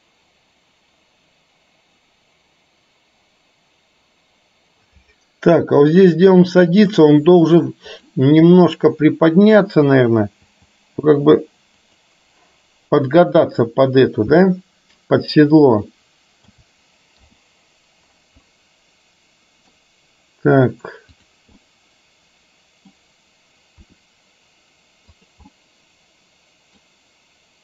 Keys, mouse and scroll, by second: 8.0 click, 10.6 g, 16.6 a, 17.3 i, 18.6-19.8 middle drag, 21.3 drag, 21.7-23.0 middle drag, 24.0 r, 25.6-27.0 middle drag.